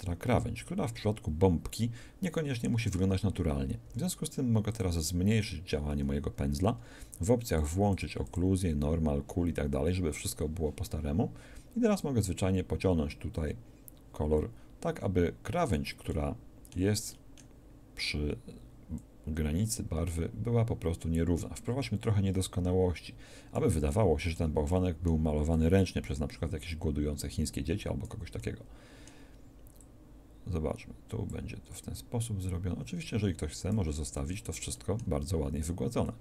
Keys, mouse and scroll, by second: 3.8 f, 7.5-10.0 drag, 12.1 click, 18.9-20.7 drag, 25.6 click, 28.3-29.7 middle drag, 29.7 click, 30.3 click, 34.1 middle click, 36.0-36.2 drag.